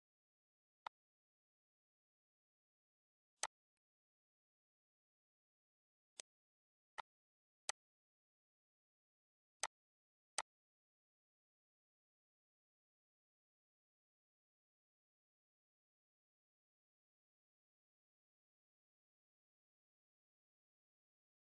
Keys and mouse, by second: 1.6 click, 4.2 click, 5.0 click, 5.6 click, 6.8 click, 8.5 ctrl+s, 8.7 ctrl+s.